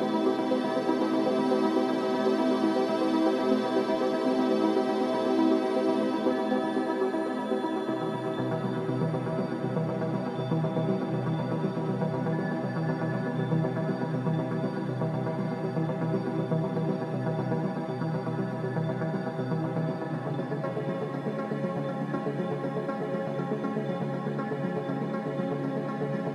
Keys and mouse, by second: 0.6 click, 0.9 g, 3.0 click, 3.2 g, 7.9 ctrl+r, 10.1 click, 10.5 g, 12.6 click, 12.9 g, 17.9 ctrl+r, 24.0 click, 26.0 click, 26.0 g, 26.2 g.